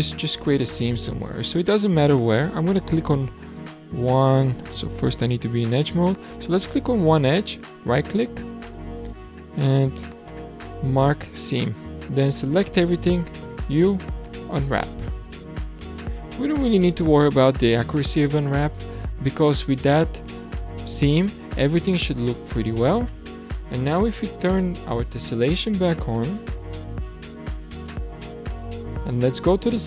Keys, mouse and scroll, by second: 0.8-2.6 scroll up 3, 2.6 alt+click, 3.5 alt+click, 5.3 click, 6.6 alt+click, 7.5-12.4 right drag, 12.4 a, 13.7 u, 17.8 Tab, 18.3-18.8 scroll down 2, 18.8-21.8 middle drag, 22.5 scroll up 3, 23.1-23.5 middle drag, 23.5-25.1 scroll down 1, 25.1 click, 26.4 click, 27.1-27.6 scroll up 6, 27.7 click, 29.4 click.